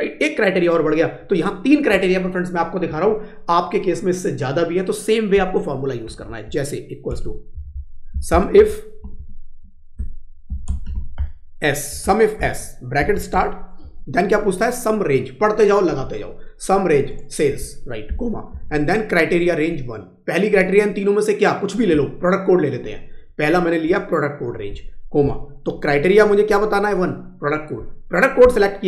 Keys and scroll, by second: 6.2 Right.